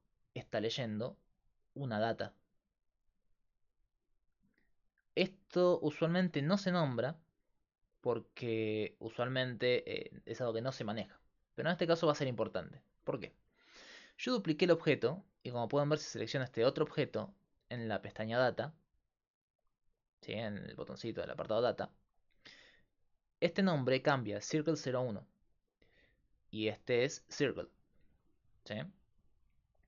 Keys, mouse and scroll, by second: 0.0-29.8 typing, 12.2-13.6 middle drag, 14.2-15.2 drag, 15.2-20.6 right drag, 26.4-28.5 drag, 28.6-29.8 drag, 28.9-29.8 right drag.